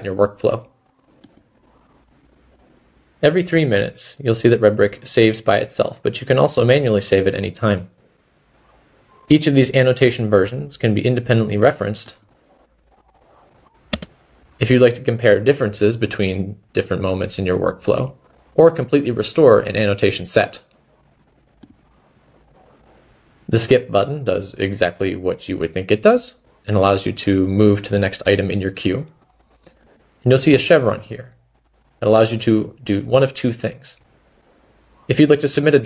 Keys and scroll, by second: 13.3-14.4 typing, 17.9 typing, 20.5 typing, 23.0-23.8 typing.